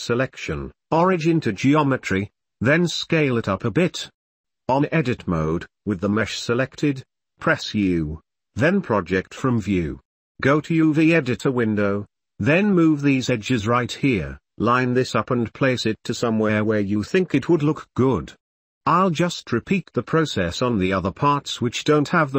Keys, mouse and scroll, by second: 0.0 shift+middle click, 0.6 shift+middle click, 0.9 scroll up 1, 1.3 p, 2.4-3.1 drag, 3.2 s, 4.0 click, 4.1-4.6 shift+middle drag, 4.8 ctrl+s, 5.4 click, 5.8 Tab, 5.8 u, 6.9 u, 9.9 s, 11.3 g, 12.8 s, 13.6 g, 14.3 Tab, 15.1 Tab, 15.3 click, 16.2 u, 18.6 g, 18.6 Tab, 18.7 shift+click, 19.1 Tab, 19.1 Tab, 19.3 u, 19.5 Tab, 19.5 g, 20.0 middle click, 20.4 Tab, 20.4 l, 20.5 shift+middle click, 21.0 middle click, 21.1 click, 21.4 u, 21.5 shift+click, 21.7 g, 21.7 s, 21.9 r, 22.3 ctrl+s, 22.3 Tab.